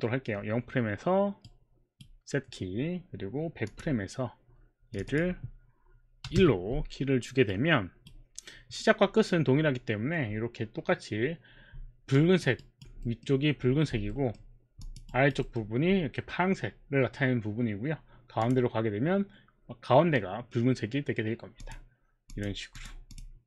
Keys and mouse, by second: 1.5 right click, 3.7 click, 5.0 click, 6.3 KP_1, 6.4 Return, 7.5 right click, 12.2 alt+click, 12.6 alt+right click, 13.1 alt+middle click, 14.0 alt+middle click, 14.8 alt+click, 15.1 alt+right click, 15.5 alt+middle click, 18.4 click, 21.6 click, 22.3 click, 22.8 click.